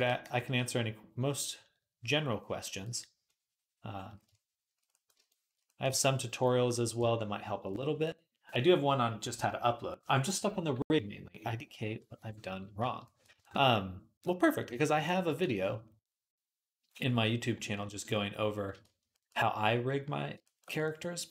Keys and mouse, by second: 2.7 click, 4.8-6.6 shift+middle drag, 11.7 KP_3, 11.8-13.3 drag, 11.8-13.3 middle drag, 11.8-13.3 right drag, 13.4-14.7 drag, 13.4-14.7 middle drag, 13.4-14.7 right drag, 14.5 j.